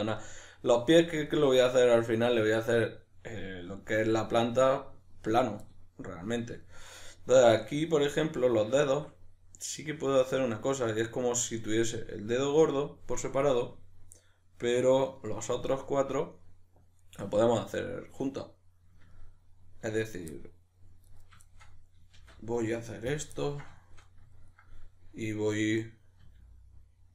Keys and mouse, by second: 21.1 right click, 21.5-27.1 shift+middle drag, 22.2 shift+d, 26.2 e.